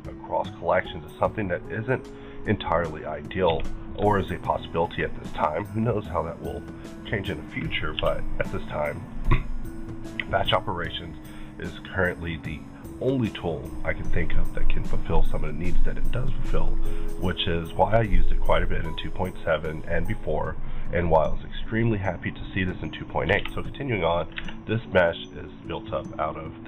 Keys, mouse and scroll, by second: 2.2-3.1 scroll down 1, 3.1 click, 3.4 q, 3.8 click, 4.8 shift+click, 5.9-8.5 shift+drag, 8.0 b, 8.5-8.9 scroll up 2, 8.9 click, 10.1 click, 10.9-11.5 middle drag, 11.3 scroll up 1, 12.8-13.2 scroll down 1, 13.2-17.1 middle drag, 17.2-22.1 middle drag, 22.1 middle click, 22.9-23.2 scroll up 2, 23.3 alt+a, 23.7 click, 24.3 Tab.